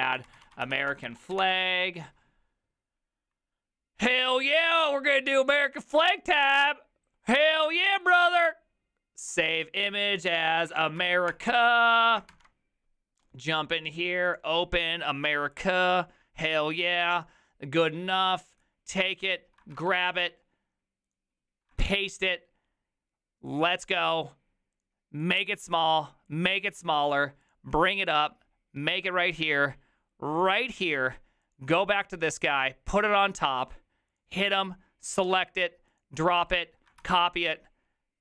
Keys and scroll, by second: 0.0-1.8 typing, 10.3-11.6 typing, 12.3 alt+=, 19.8 ctrl+c, 21.8 ctrl+v, 37.0 ctrl+c.